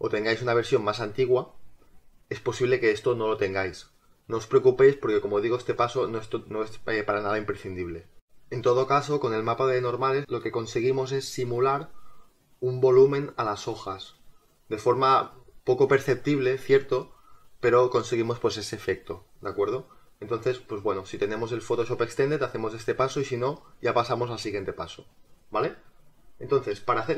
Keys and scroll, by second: 8.2 space.